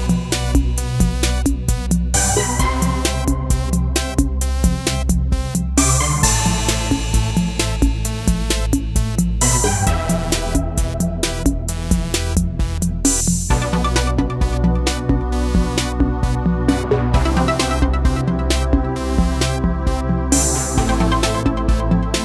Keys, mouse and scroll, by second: 5.9 click, 9.9-17.5 drag.